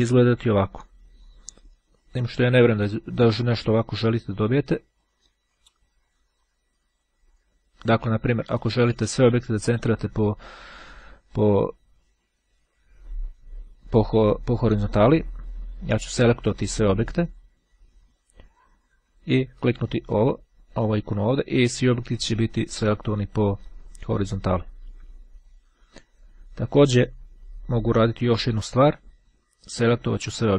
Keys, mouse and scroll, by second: 2.5 click, 4.0-6.7 drag, 7.1 click, 8.2-9.6 drag, 16.2 click, 19.2-20.4 drag, 21.8 click, 28.0-30.5 drag.